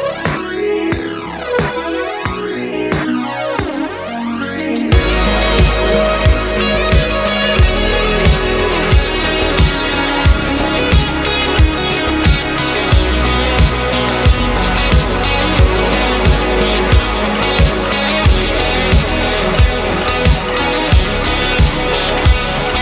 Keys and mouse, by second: 0.8 click, 1.3 click, 2.5 middle click, 3.2 e, 3.3 x, 4.7-5.3 drag, 5.6 middle click, 6.3-6.9 middle drag, 7.0-8.0 middle drag, 8.1 middle click, 10.0 b, 11.4-12.7 middle drag, 12.9 KP_3, 13.7 shift+d, 13.9 x, 14.3 y, 16.0 click, 16.7-17.2 middle drag, 17.5 middle click, 18.8-19.3 middle drag, 19.3 click, 19.3 right click, 20.5-20.9 drag, 20.5-20.9 right drag, 21.6 shift+middle click, 22.0 shift+right click, 22.4-22.8 shift+middle drag.